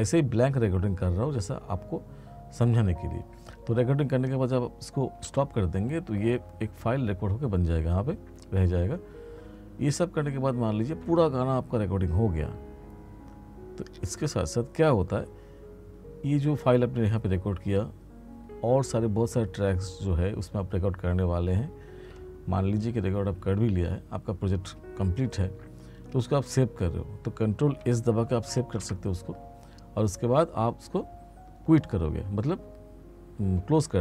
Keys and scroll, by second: 5.2 space, 28.5 ctrl+s.